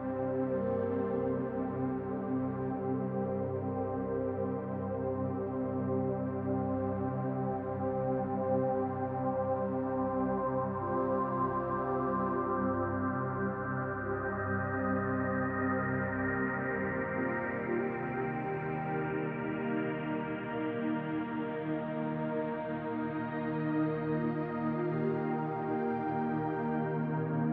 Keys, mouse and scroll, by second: 3.9 click, 6.9 KP_7, 9.1 shift+s, 11.1-11.5 scroll up 5, 12.2 scroll up 1, 12.7 shift+a, 16.4 click, 19.6 middle click, 20.7-21.2 scroll up 4, 21.2 shift+middle click, 21.8-22.3 scroll up 1, 23.4 click, 25.7 click.